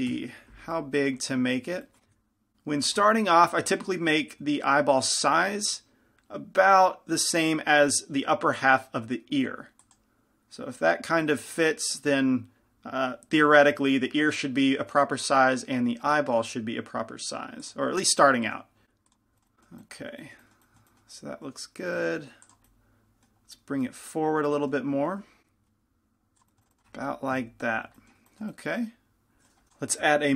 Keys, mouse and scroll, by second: 0.3 KP_5, 0.9 middle click, 2.2 s, 3.3-5.1 drag, 4.6 s, 5.8-7.3 drag, 5.8 g, 11.0-15.4 drag, 11.0 g, 18.7-19.9 drag, 18.7 s, 19.4-24.6 middle drag, 20.0 click, 20.2 z, 22.1 g, 22.8-24.6 drag, 25.3 g, 26.5-28.1 drag, 26.5-28.1 middle drag, 27.5 KP_5, 28.2-29.7 middle drag, 29.7 g.